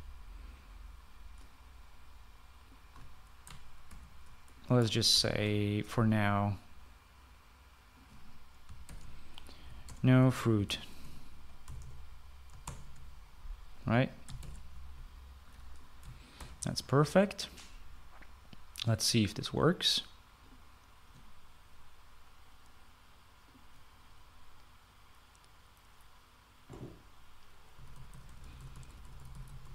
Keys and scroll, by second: 0.0-0.4 typing, 4.8 ctrl+c, 6.1 ctrl+v, 9.6-14.1 typing, 15.6 typing, 17.3 ctrl+s, 28.7-29.7 typing.